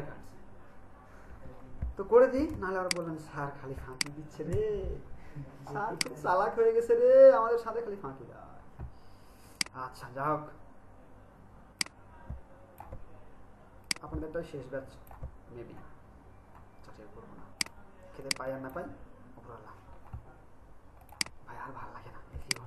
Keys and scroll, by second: 2.5 ctrl+alt+space.